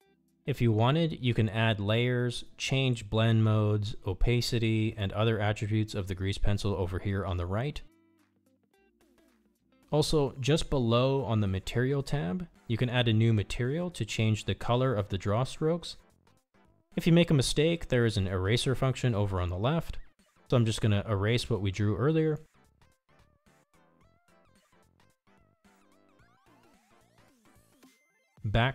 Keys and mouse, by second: 2.3 KP_1, 5.3 click, 16.2 click, 23.1 click, 24.6-28.6 drag.